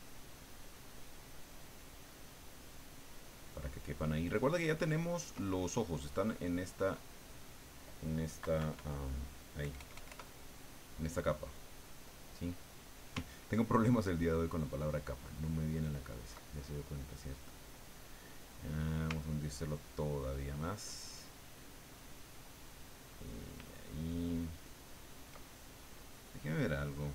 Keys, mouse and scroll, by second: 6.8 click, 8.4 KP_Subtract, 9.6 KP_Add, 11.5 click, 13.2-16.4 ctrl+drag, 16.5-19.1 ctrl+drag, 19.2-23.5 ctrl+drag, 23.7-25.2 ctrl+drag, 26.7-27.1 drag.